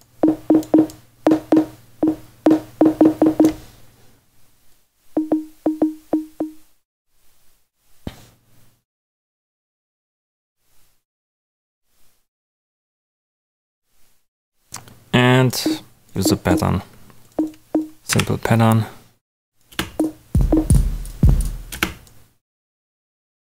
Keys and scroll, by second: 18.0 Delete, 19.7 space, 21.7 space.